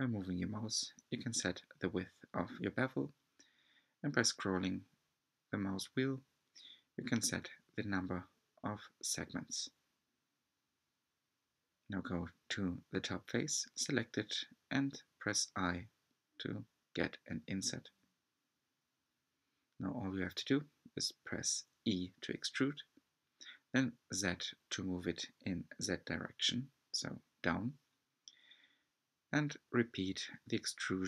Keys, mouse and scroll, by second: 0.0 scroll down 3, 0.3 shift+middle click, 1.1-1.9 scroll up 1, 1.9 alt+click, 2.4 b, 4.9-5.5 scroll down 10, 5.8 scroll up 2, 6.0 Tab, 6.4 Tab, 6.6 shift+middle click, 7.1 scroll up 3, 7.4 middle click, 8.1 Tab, 8.9 Tab, 9.4 3, 9.6 click, 10.1 click, 10.8 alt+z, 15.3 click, 16.2 click, 16.8 alt+z, 17.3 scroll up 2, 17.6 e, 19.9 e, 22.5 shift+middle click, 23.1 e, 24.8 s, 27.8 e, 29.6 e.